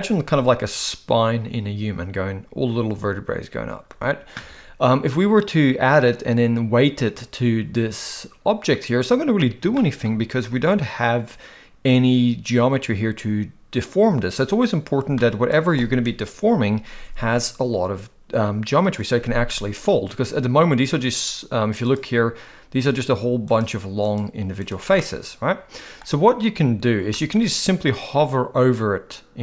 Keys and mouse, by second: 9.7 shift+middle click, 15.1 shift+middle click, 21.8 click, 22.8 click, 24.1 click, 24.6 click, 25.0-26.0 middle drag, 27.1 shift+middle click.